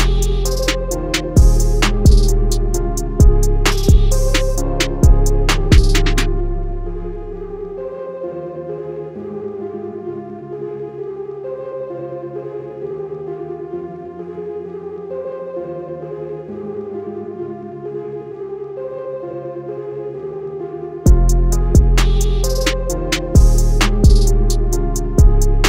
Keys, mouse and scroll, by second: 8.1 click, 9.4 BackSpace, 10.2 click, 15.4 click, 20.9 shift+Num_Lock, 21.1-24.4 typing.